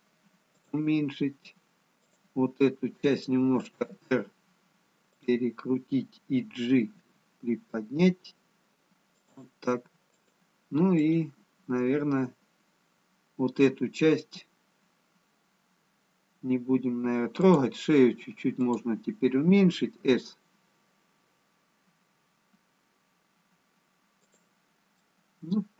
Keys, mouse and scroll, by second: 2.1 click, 4.0 r, 7.1 g, 10.2 click, 11.0 click, 16.4-17.6 scroll up 1, 17.6 click, 19.1 click, 20.1 s, 25.4 middle click.